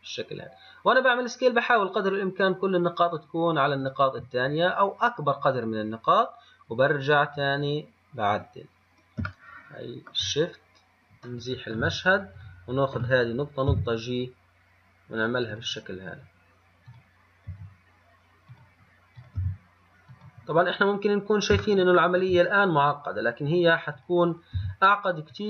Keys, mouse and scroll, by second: 7.1 shift+scroll up 4, 8.2 scroll up 2, 9.6-11.0 shift+middle drag, 11.0-11.3 scroll up 2, 11.5-12.6 shift+middle drag, 12.6 click, 17.1 click, 19.5 click, 20.8 scroll down 1, 21.9 shift+middle click, 22.8 scroll up 3, 24.2 click, 24.8 g.